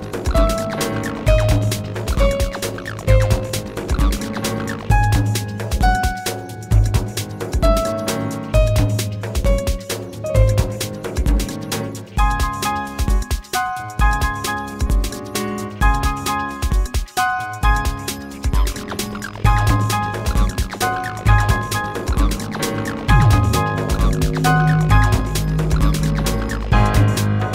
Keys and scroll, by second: 20.9 space, 24.8 space.